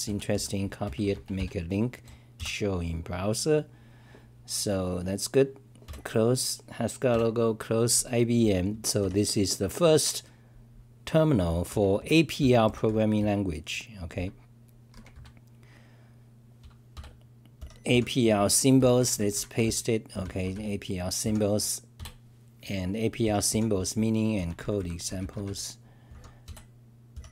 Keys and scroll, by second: 0.1 Return, 0.1 k, 0.4 k, 2.7 F5, 11.7-13.3 typing, 12.4 Return, 18.6-20.1 typing, 24.2-25.2 typing.